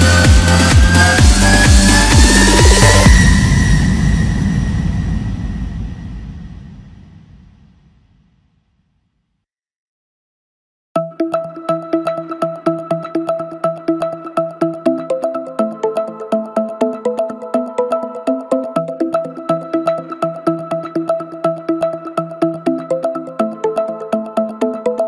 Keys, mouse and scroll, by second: 0.2 g, 2.4 s, 3.5 g, 4.8 e, 5.9 s, 7.3 g, 10.1 middle click, 10.7 click, 11.3 KP_1, 12.2 s, 14.1 e, 16.8 click, 17.4-18.7 middle drag, 18.7 e, 19.2 s, 22.6 KP_1, 23.6 scroll up 1, 23.9 scroll down 1, 24.2-25.0 middle drag.